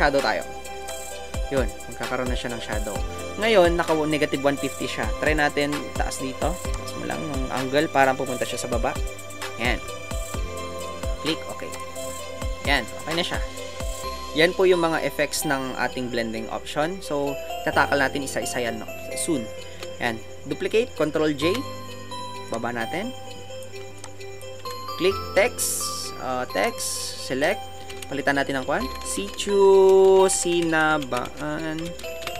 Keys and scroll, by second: 25.0 t, 32.0-32.3 typing.